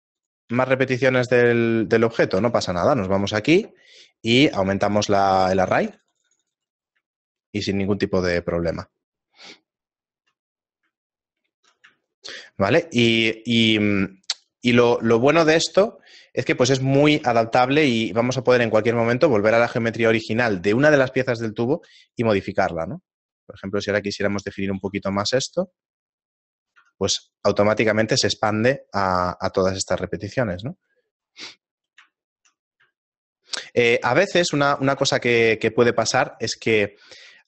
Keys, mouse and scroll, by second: 0.6 s, 2.4 Tab, 3.4 right click, 5.3-6.1 click, 6.3 click, 7.2 click, 7.2 shift+middle click, 8.6 middle click, 9.1 shift+middle click, 10.5 middle click, 11.4 ctrl+middle click, 12.3 ctrl+middle click, 13.1 shift+middle click, 14.0 middle click, 14.8 shift+middle click, 15.8 right click, 17.9 Tab, 19.0-20.7 scroll up 6, 20.7 shift+middle click, 20.7-21.0 scroll up 5, 21.9 ctrl+r, 24.8 ctrl+r, 26.8 Tab, 27.1 a, 27.4-29.7 scroll down 11, 28.8 middle click, 29.7 shift+middle click, 31.0 middle click, 31.4-31.7 scroll down 1, 31.9 right click, 32.3 shift+middle click, 32.7 middle click, 33.0 ctrl+middle click, 33.9 middle click, 34.8 scroll up 6, 36.8 Tab, 36.8-37.3 scroll down 2, 37.3 Tab.